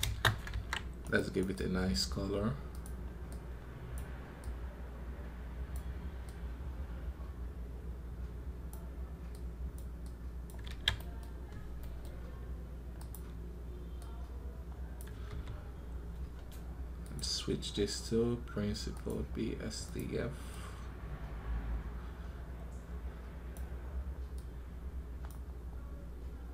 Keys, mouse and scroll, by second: 1.3 right click.